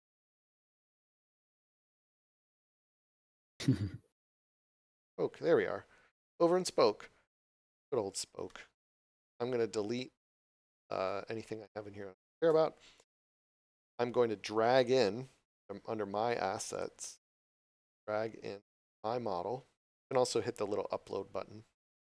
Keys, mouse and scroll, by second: 3.5 scroll up 1, 7.5 click, 8.5 shift+middle click, 14.8 click, 19.6 scroll down 1, 21.1 click.